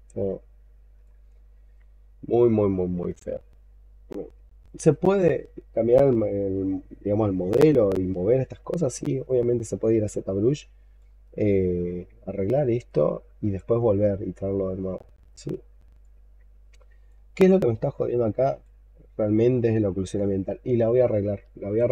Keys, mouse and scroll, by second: 9.1 alt+click, 12.7 alt+click, 13.7-14.3 scroll up 4, 14.4 scroll up 3, 15.2-15.8 scroll down 5, 15.9 alt+click, 17.7 alt+click, 19.0-20.2 scroll down 7, 20.2 alt+middle click.